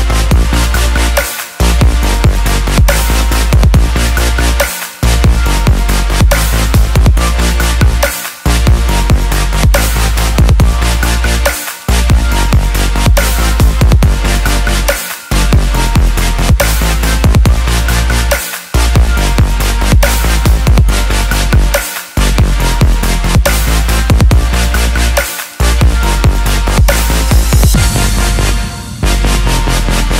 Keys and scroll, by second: 18.3 ctrl+d.